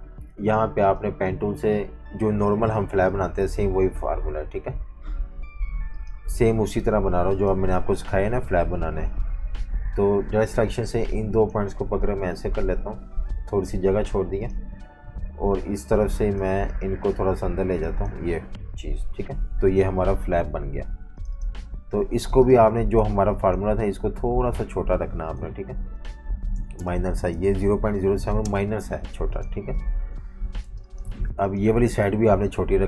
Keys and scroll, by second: 9.9 a, 21.5 super+-, 21.7 super+-, 22.4-23.0 typing, 26.3-27.8 typing, 28.4 Return, 29.0 v, 30.1 super+-, 30.7 typing.